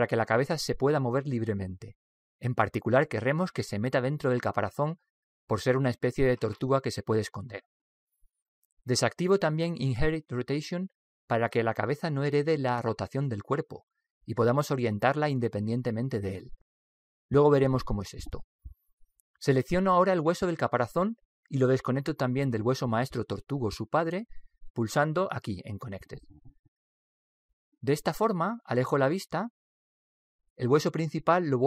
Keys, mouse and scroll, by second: 0.1 click, 11.7 click, 21.5 right click, 25.2 click, 29.9-31.6 middle drag.